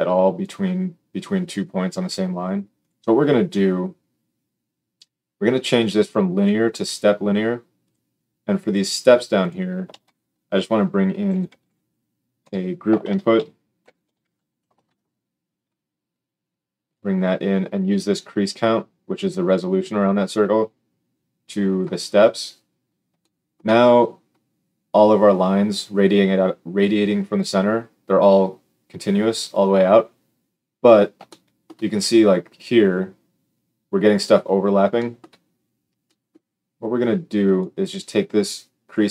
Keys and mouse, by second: 2.7 click, 5.8-7.9 drag, 9.3 click, 9.8 shift+a, 13.0 shift+a, 18.4-39.1 drag.